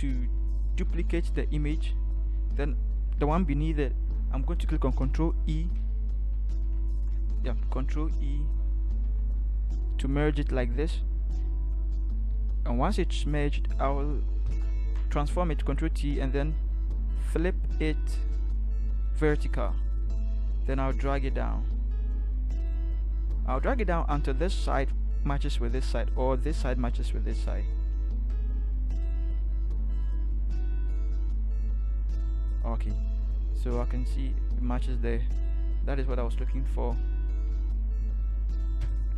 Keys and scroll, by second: 6.7 F2, 9.1 ctrl+e, 14.4 ctrl+t, 37.5 ctrl+-, 37.9 ctrl+-, 38.1 ctrl+-, 38.8 Return.